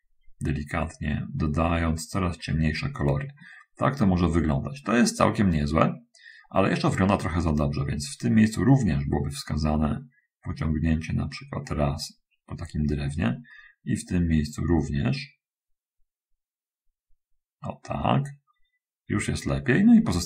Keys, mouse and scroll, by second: 1.5-2.9 drag, 9.2-12.7 drag, 13.9-18.4 drag.